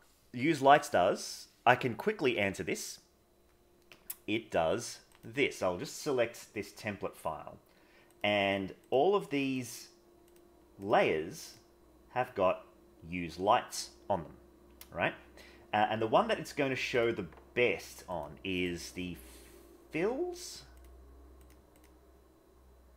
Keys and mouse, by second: 0.0 middle click, 0.9 middle click, 2.3 click, 5.1 click, 8.1 click, 8.8 click, 9.5 click, 10.8 click, 11.4 click, 18.1 click, 21.4 click.